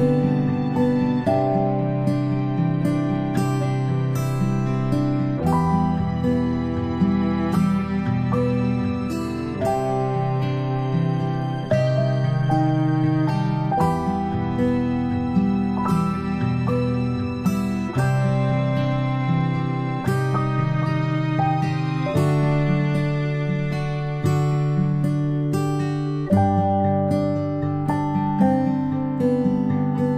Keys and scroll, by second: 15.9 ctrl+p, 21.6 i, 25.7 v.